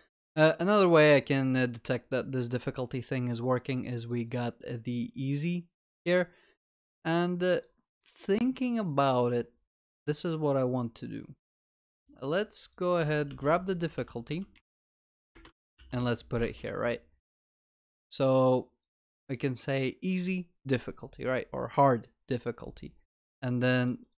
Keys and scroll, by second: 11.7 ctrl+w, 13.2 ctrl+w, 15.5 Delete, 15.7 ctrl+v, 15.8 ctrl+s.